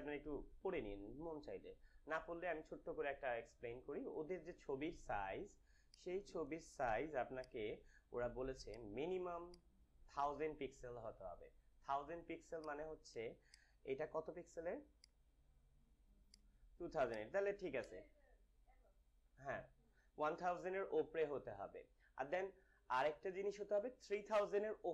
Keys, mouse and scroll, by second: 1.6 scroll up 1, 5.8-8.6 drag, 8.6 right click, 10.0 click, 12.5-16.2 drag.